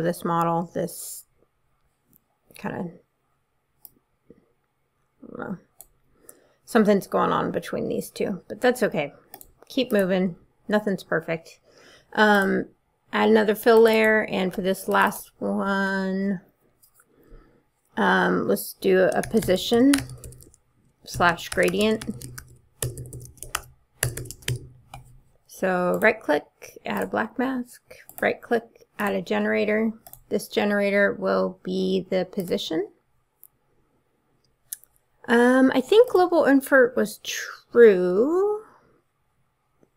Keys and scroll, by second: 19.0-24.3 typing, 24.5 Return.